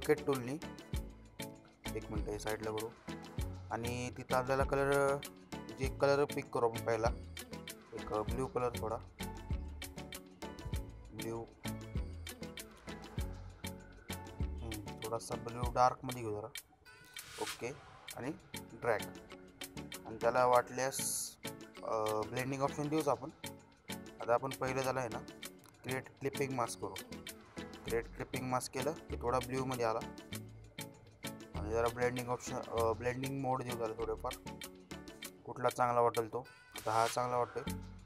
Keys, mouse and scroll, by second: 1.2-3.0 drag, 5.9-10.8 drag, 24.9 click, 25.8 right click, 27.2 click, 29.6 click, 37.6 click.